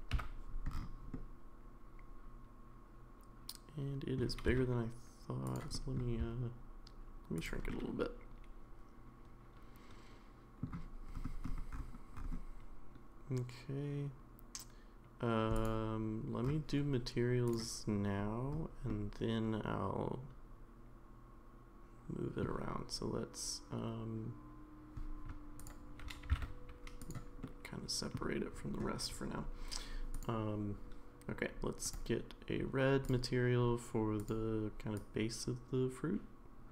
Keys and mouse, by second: 0.1 KP_Decimal, 1.1-4.2 middle drag, 4.5 s, 5.7 middle click, 6.2 s, 7.7-10.6 middle drag, 17.5 click, 18.9-22.4 middle drag, 26.2 g, 27.5-28.1 middle drag, 30.1 click, 31.8 drag.